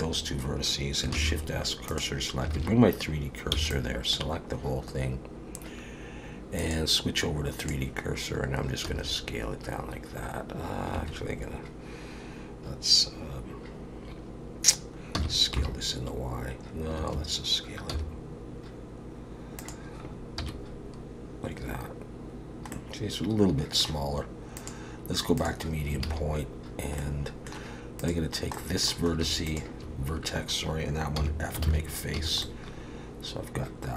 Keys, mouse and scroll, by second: 1.1 shift+s, 2.5 alt+a, 3.5 b, 6.6 click, 8.8 s, 15.1 s, 17.9 s, 20.4 KP_1, 22.7 middle click, 24.6 click, 26.1 alt+a, 27.0 middle click, 28.0 click, 28.6 middle click, 29.5 shift+click, 31.2 f, 31.7 alt+a, 32.2 a, 32.4 middle click.